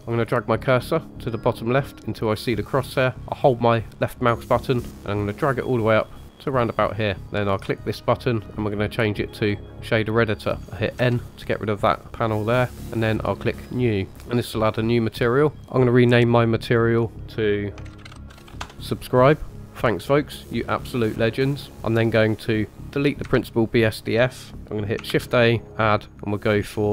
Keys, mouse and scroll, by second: 4.1-7.1 drag, 7.6-9.5 drag, 11.0 n, 13.6 click, 16.6 click, 21.7 Delete, 21.7 ctrl+z, 21.7 click, 22.4 click, 23.2 Delete, 25.1 shift+a.